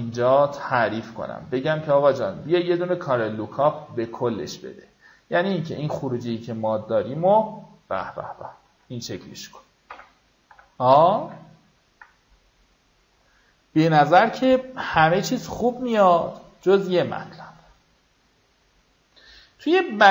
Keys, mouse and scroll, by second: 7.3 scroll down 1, 7.9 scroll up 1, 10.5 v, 10.8 click, 11.7 ctrl+d, 18.9-20.1 drag.